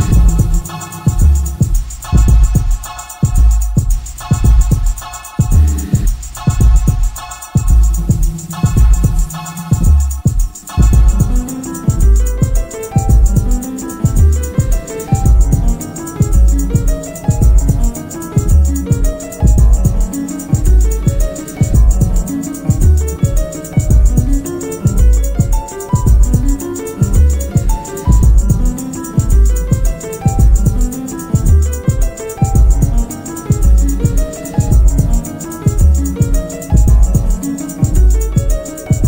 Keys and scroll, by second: 3.6 3, 4.3 [, 4.6 ], 6.1 ctrl+z, 12.7 4, 14.4 Return, 14.8 Escape, 14.9 Delete, 16.6 ctrl+d, 16.7 Escape, 18.3 F1, 24.4 F1, 26.7 F2, 28.7 F1, 29.4 1, 34.2 F1, 34.3 F2.